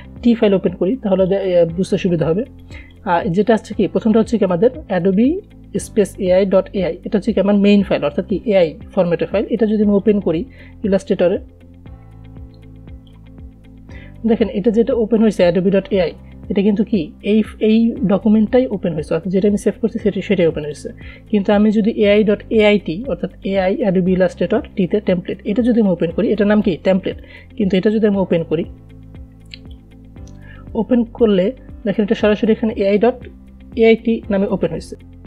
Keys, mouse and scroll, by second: 1.5-6.8 drag, 7.8-10.4 drag, 10.4-15.9 drag, 21.0-26.2 drag, 26.2-32.7 drag, 34.9 click.